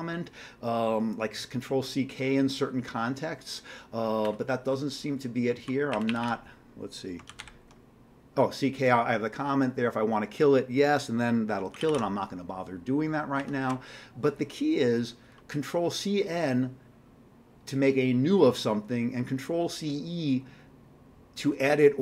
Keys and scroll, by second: 4.7 Down, 5.2 Down, 5.9 Up, 6.1 Up, 6.2 Up, 7.3 ctrl+c, 7.4 ctrl+k, 11.7 ctrl+g, 11.8 ctrl+g, 13.4 q.